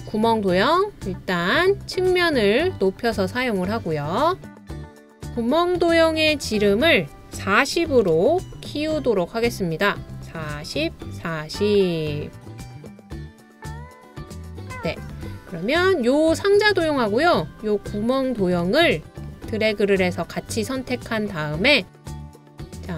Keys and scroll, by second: 7.6-8.5 typing, 12.6-13.6 typing.